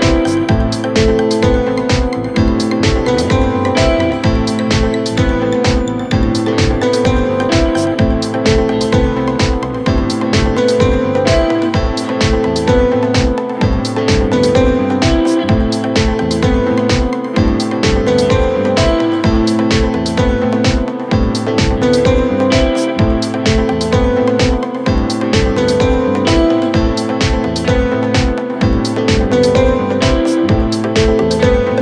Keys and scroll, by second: 12.9 F3, 15.4 Right, 15.9 Down, 16.6 Right, 18.2 Down, 18.8 Left.